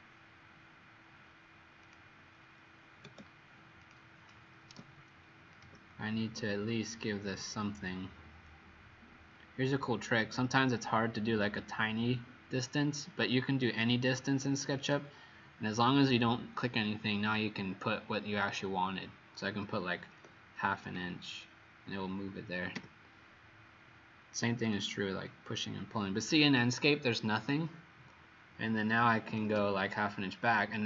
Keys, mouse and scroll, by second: 3.7 click, 4.7 m, 5.5 click, 20.1 KP_Decimal, 20.2 KP_5, 20.8 KP_Enter, 22.7 p, 24.7 click, 29.0 KP_Decimal, 29.2 KP_5, 29.4 KP_Enter.